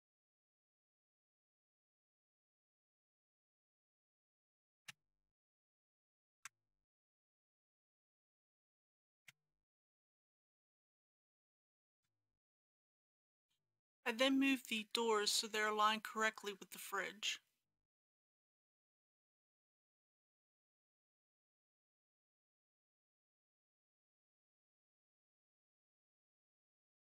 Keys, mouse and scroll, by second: 0.0-2.1 typing, 0.1 click, 0.8 shift+click, 1.4 click, 2.0 click, 2.7 click, 2.8 shift+middle click, 3.1 click, 3.2-4.8 typing, 3.6 click, 4.6 click, 5.3 Tab, 5.3 middle click, 5.6 right click, 5.6 click, 5.9 Tab, 6.1-7.1 typing, 7.5 click, 7.6 scroll down 1, 7.7 middle click, 7.8 Tab, 8.0 click, 9.1 KP_Decimal, 9.2 KP_5, 9.7 click, 9.8 Tab, 9.9 2, 10.0 alt+a, 10.1 middle click, 10.7 ctrl+b, 10.8 click, 10.9 ctrl+z, 11.0 ctrl+b, 11.6 click, 11.9-13.5 typing, 12.3 click, 12.5 Tab, 12.8 click, 13.2 Return, 16.5 scroll up 1, 18.4 shift+middle click, 22.0 ctrl+click, 22.7 ctrl+click, 23.3 ctrl+click, 24.6 ctrl+g, 24.8 y.